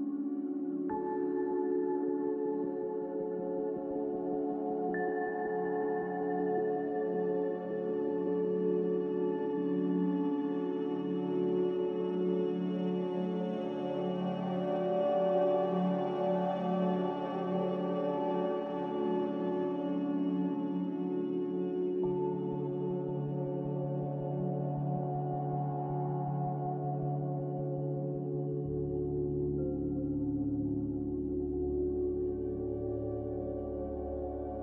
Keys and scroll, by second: 3.8 m, 6.8 z, 8.0 Delete.